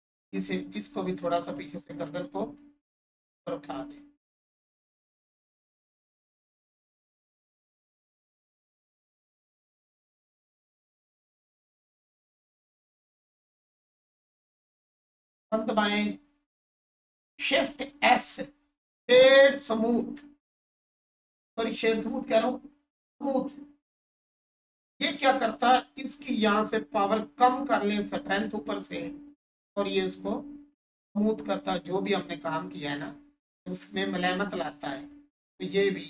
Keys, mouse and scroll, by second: 0.1 click, 7.8 alt+click, 10.7 click, 16.4 1, 26.5 click, 31.0 alt+space, 31.4 alt+click, 34.5 alt+click.